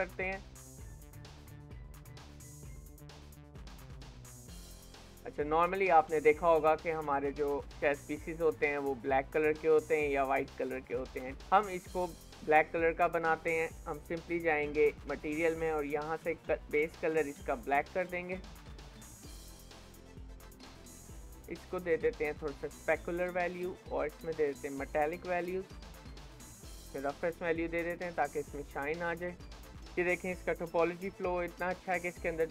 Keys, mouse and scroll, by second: 1.9-2.4 scroll down 1, 2.4-3.7 middle drag, 3.7 scroll up 2, 3.9 ctrl+s, 4.4-5.4 shift+middle drag, 5.4-6.0 scroll up 1, 6.0-9.0 scroll down 1, 11.9 scroll up 1, 12.3 shift+middle click, 12.7 scroll down 1, 13.0 shift+middle click, 13.9-20.0 drag, 20.0-22.2 scroll down 3, 22.2-26.0 drag, 26.0-26.9 scroll down 1, 26.9-29.8 drag, 29.8 middle click, 30.6 KP_7, 31.4-31.7 scroll up 2, 31.7 shift+middle click, 32.1 scroll down 2, 32.4 shift+middle click.